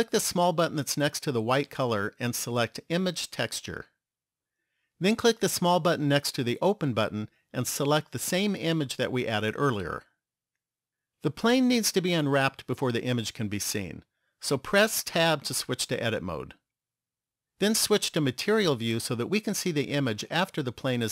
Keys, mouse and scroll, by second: 0.7 click, 6.1 click, 15.3 Tab, 18.9 click.